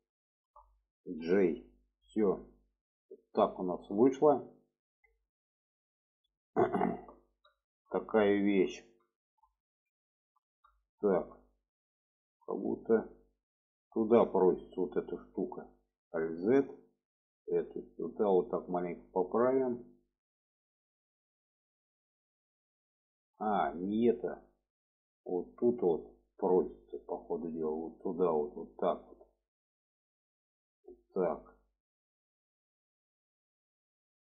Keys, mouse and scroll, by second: 0.2 shift+click, 1.6 click, 2.4-6.2 middle drag, 6.7 shift+middle click, 7.5 shift+middle click, 8.3 shift+middle click, 9.1 shift+middle click, 10.0 shift+middle click, 10.7 shift+middle drag, 14.3 shift+middle click, 16.3 alt+z, 16.8 click, 17.7 click, 19.0-19.6 drag, 20.7-21.0 shift+middle drag, 21.9 shift+middle drag, 25.6 click, 27.3-29.8 drag, 30.2 click, 31.1-32.4 drag, 33.3 shift+middle drag.